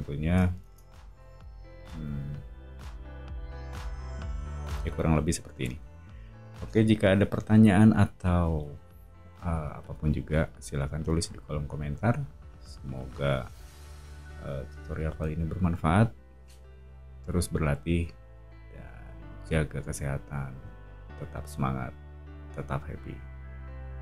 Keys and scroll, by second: 0.6 space, 0.9 Escape, 8.5 [.